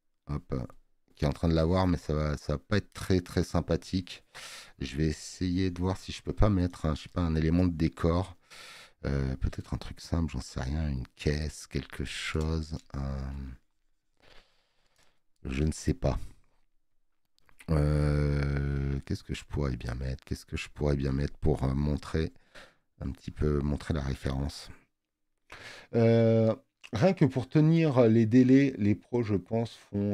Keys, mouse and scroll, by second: 7.4 space, 7.6 click.